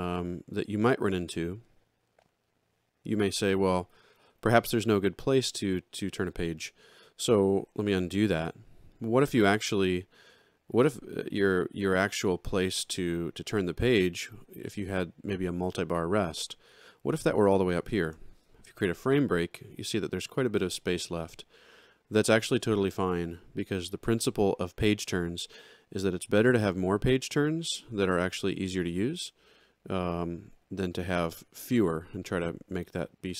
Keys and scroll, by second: 7.8 ctrl+z, 18.0 shift+f.